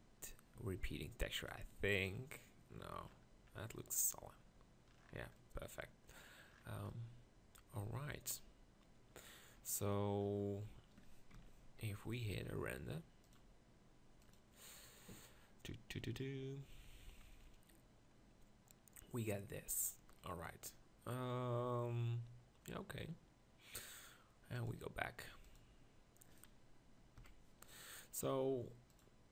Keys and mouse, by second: 0.6 Tab, 9.5-12.0 middle drag, 11.4 ctrl+KP_Decimal, 27.2 KP_1.